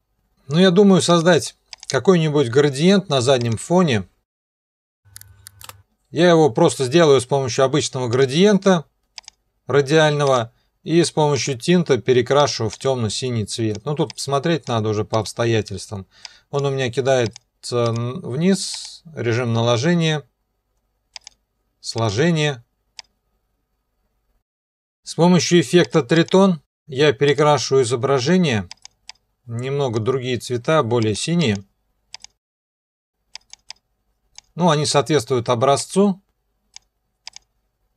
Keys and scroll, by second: 4.1-5.0 typing, 5.6 Return, 5.8 Delete.